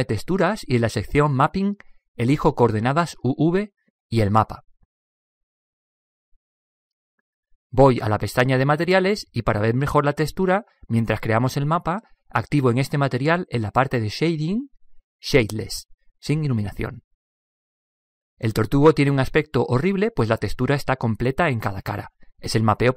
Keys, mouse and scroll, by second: 0.2-3.9 drag, 4.3-6.1 drag, 9.2-12.1 drag, 15.7 click, 17.5 click.